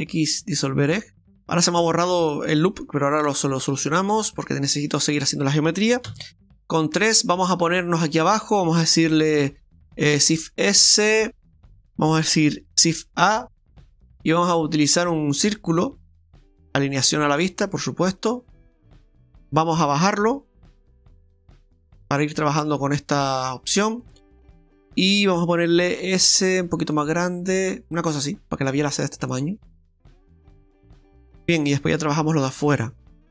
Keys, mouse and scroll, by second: 1.1 middle click, 1.1 scroll down 4, 3.1-3.7 scroll up 2, 3.8 shift+middle click, 4.7 shift+middle click, 6.1 KP_3, 6.9-7.4 scroll down 3, 7.5 shift+middle click, 10.2 shift+s, 12.8 shift+a, 17.2 click, 18.3 click, 22.1 click, 23.2 click, 24.0 click, 24.2-24.6 scroll down 2, 26.3 s, 28.2-28.7 scroll up 4, 28.8 shift+middle click, 31.1 shift+middle click, 32.8 scroll up 1.